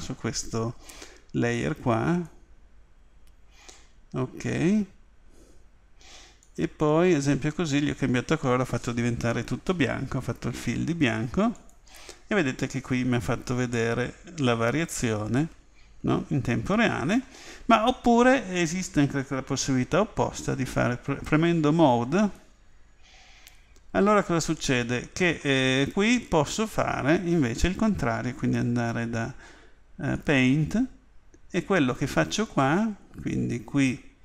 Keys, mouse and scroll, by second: 13.8-15.7 middle drag, 22.2 click, 28.4 click.